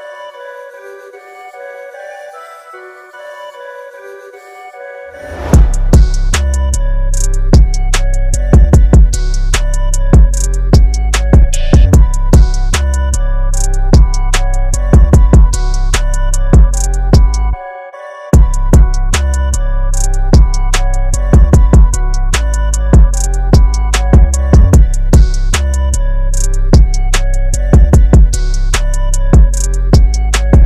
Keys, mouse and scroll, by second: 0.6 scroll up 1, 4.3-5.2 scroll down 1, 5.2-7.9 scroll up 1, 8.3 scroll down 1, 8.4-9.8 scroll up 1, 10.0 click, 12.4 KP_0, 13.7 click, 15.5 click, 16.3 KP_0, 17.3 click, 19.2 click, 20.4 KP_6, 20.8 KP_7, 21.8 click, 23.6 scroll up 1, 28.5 click, 29.7 scroll down 1, 30.3 click.